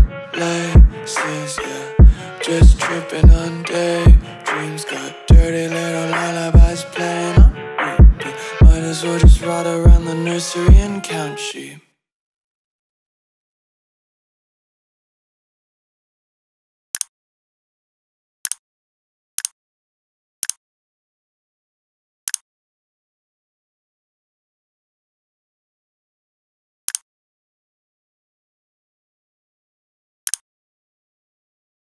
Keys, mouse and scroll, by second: 0.6 click, 6.2-7.2 scroll up 1, 12.3 click.